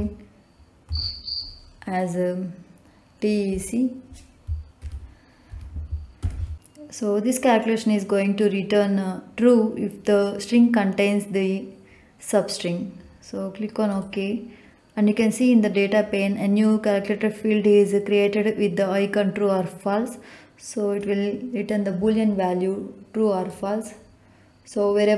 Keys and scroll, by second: 0.8 Left, 4.7 shift+t, 5.5 shift+e, 6.1 shift+c.